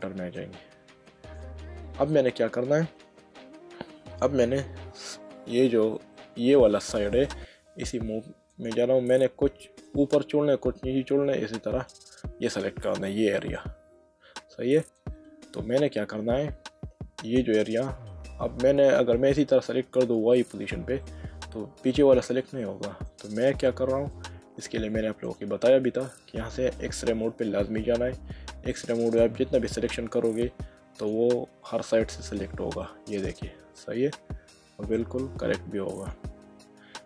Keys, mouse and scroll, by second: 1.0 middle click, 6.1 middle click, 8.5 click, 9.9 click, 15.0 click, 21.0 middle click, 24.1 click, 25.3 click, 26.8 click, 29.2 click, 32.4 middle click, 35.9 click.